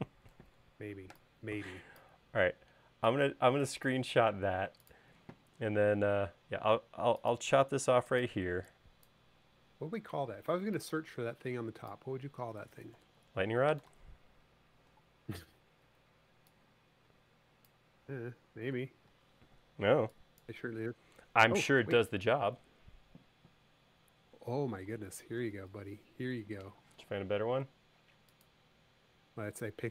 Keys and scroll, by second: 0.7 shift+super+4, 6.4 i, 8.7 e, 10.7 space, 13.3 BackSpace, 14.2 super+z, 19.1 BackSpace, 19.6 e.